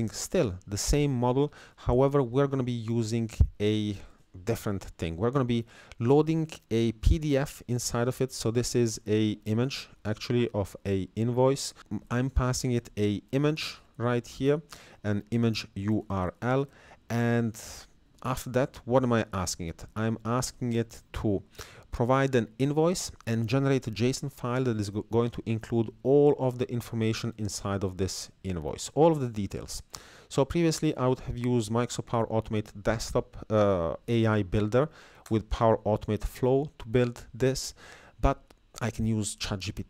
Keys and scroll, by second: 11.8 Down, 12.1 Left, 13.7 Down, 14.0 Left, 14.6 Up, 15.2 Down, 19.4 Up, 20.6 Up, 30.7 ctrl+c, 34.7 ctrl+v, 35.3 Return.